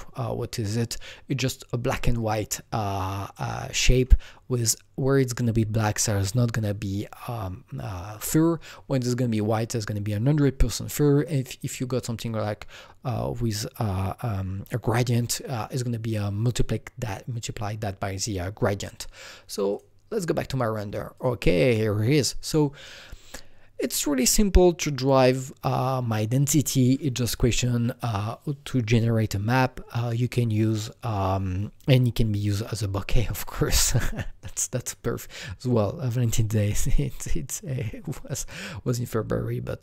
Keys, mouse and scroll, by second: 19.8-21.1 drag, 21.1-23.8 drag.